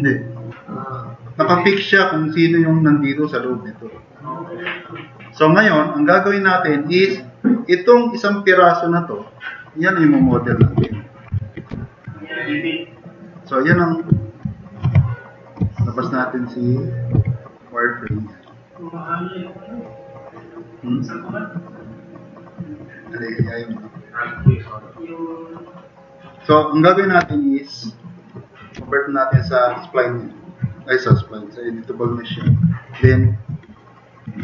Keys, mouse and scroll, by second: 10.6 alt+q, 11.4 alt+q, 11.7 s, 12.2 click, 12.6 click, 13.0 click, 13.4 drag, 15.7 n, 17.1 h, 18.5 drag, 18.8 click, 19.8-20.6 drag, 25.5-26.2 drag, 27.2 2, 28.8 c, 29.6 click, 31.2 click, 32.7-33.6 typing, 33.8 click, 34.1 right click.